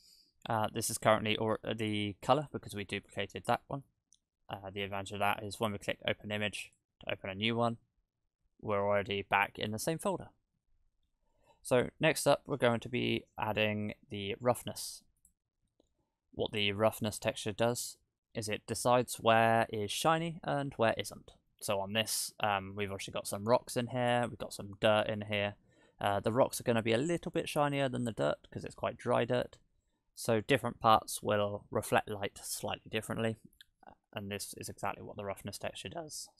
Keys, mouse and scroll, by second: 2.8 middle click, 3.6 middle click, 6.7 click, 22.1-24.9 scroll up 3, 24.9-26.0 scroll up 1, 26.0-27.4 scroll down 6, 27.5 middle click, 34.7 click.